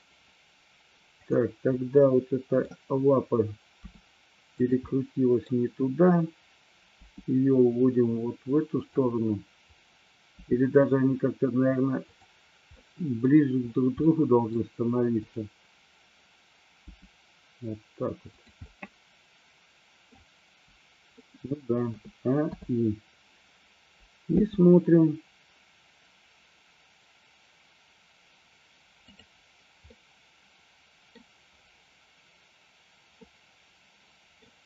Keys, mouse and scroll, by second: 1.5 drag, 2.1-2.7 middle drag, 4.0 r, 4.7 click, 5.0-5.5 middle drag, 5.5-6.6 scroll down 1, 7.1 g, 8.8 click, 10.5 g, 12.8 scroll up 1, 13.0 middle click, 14.1 scroll up 1, 14.3 middle click, 15.3 click, 16.8 g, 18.5 click, 18.7-20.2 middle drag, 21.2 scroll up 1, 21.3 middle click, 22.0 a, 22.6 i, 24.5 space, 30.0-31.3 middle drag, 33.3-34.5 middle drag.